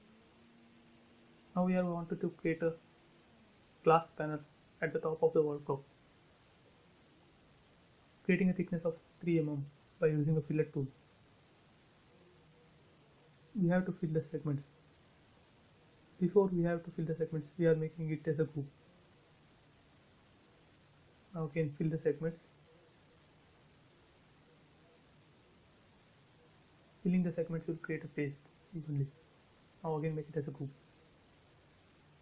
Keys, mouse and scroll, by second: 2.0 click, 2.2 space, 2.9 click, 4.2 f, 5.2 click, 7.2-7.9 typing, 7.8 Return, 9.0-9.3 scroll up 1, 12.1 l, 12.8 click, 16.1 space, 17.0 click, 17.5 right click, 18.5 click, 20.0 l, 20.8 click, 21.7 space, 21.9 scroll down 1, 26.1 l, 26.6 click, 27.7 space, 28.5 click, 28.8 right click, 29.8 click, 29.9 space, 30.0 click, 30.4-30.9 scroll down 1, 31.0 scroll down 1, 31.8 scroll down 1.